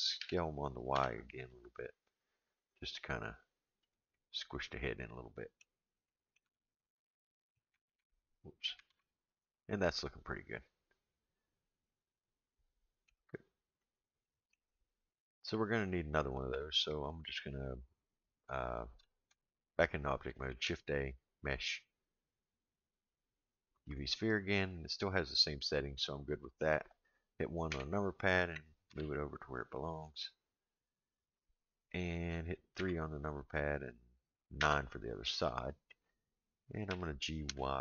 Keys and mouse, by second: 0.2 s, 4.1-5.6 middle drag, 6.0 middle click, 6.4 Tab, 6.9-7.5 middle drag, 7.8 alt+a, 8.9 alt+z, 9.4-13.1 middle drag, 13.8-14.5 middle drag, 15.5-16.5 middle drag, 20.5 shift+a, 26.0-26.6 middle drag, 27.7 KP_1, 28.9 g, 32.8 KP_3, 34.6 KP_9, 36.9 g.